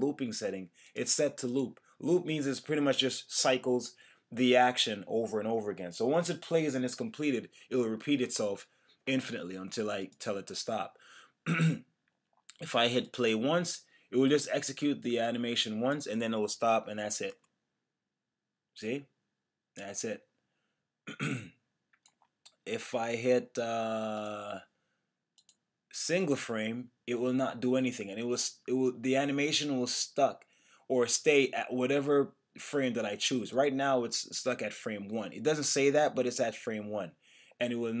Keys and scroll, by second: 17.3 Return, 37.4 Return.